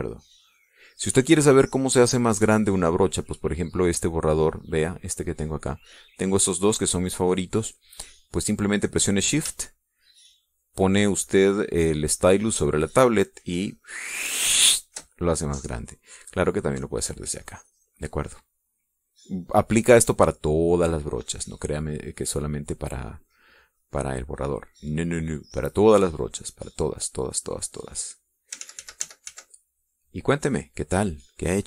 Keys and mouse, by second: 6.4 click, 6.9 click, 7.5-8.8 drag, 13.9-16.4 shift+drag, 18.1 click, 18.7 click, 20.3 click, 21.5 middle click, 23.9-27.1 drag, 28.5-29.7 drag, 29.9 ctrl+z, 31.1-31.6 ctrl+drag.